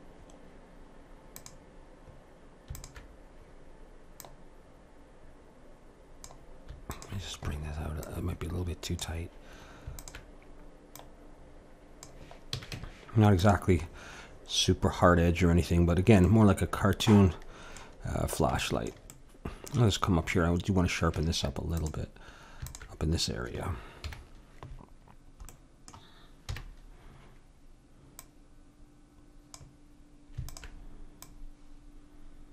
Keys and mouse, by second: 0.2-6.1 drag, 6.9-9.8 drag, 10.0-12.7 drag, 12.5 a, 12.7 Tab, 13.9-16.3 drag, 16.3-21.1 middle drag, 21.1 Tab, 22.6-24.0 drag, 24.0 KP_Decimal, 25.0 middle click, 25.5-27.6 drag, 26.5 KP_1, 28.1-30.1 drag, 30.5-32.5 drag.